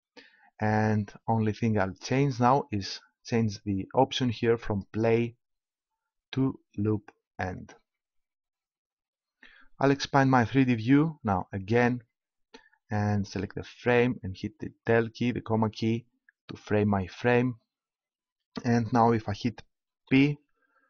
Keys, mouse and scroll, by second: 4.7-6.7 drag, 11.4-13.1 drag, 14.5 KP_Decimal, 20.1 p.